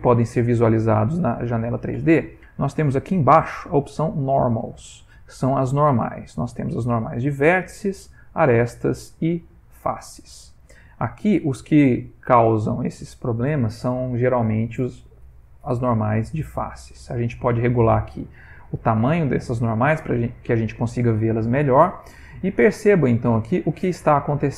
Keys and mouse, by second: 21.5 middle click, 22.3 ctrl+middle click, 23.2 shift+middle click, 23.7 middle click, 24.3 a.